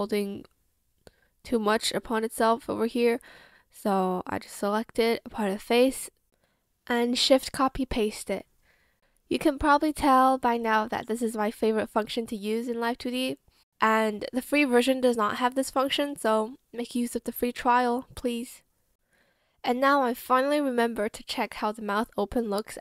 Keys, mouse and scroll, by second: 8.6 ctrl+shift+c, 9.2 ctrl+shift+v, 16.4 Escape.